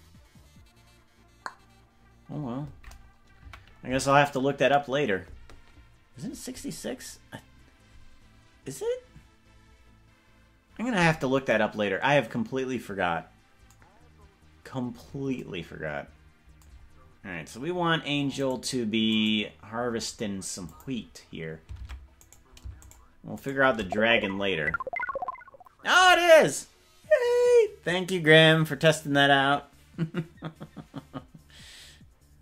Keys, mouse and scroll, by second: 3.5 KP_Decimal, 17.1 scroll down 2, 17.3 scroll down 1, 18.7 right click, 19.5 right click, 20.7 click, 21.9 ctrl+Tab, 22.5 right click, 23.1 shift+right click, 23.7 right click.